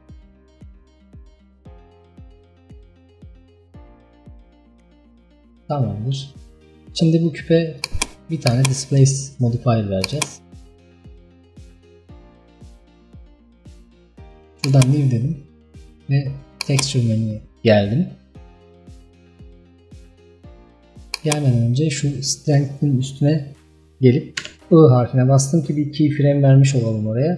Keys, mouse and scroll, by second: 4.6 scroll down 1, 5.8-10.2 shift+middle drag, 10.2-11.3 drag, 11.3-12.3 scroll up 2, 14.7-23.5 drag.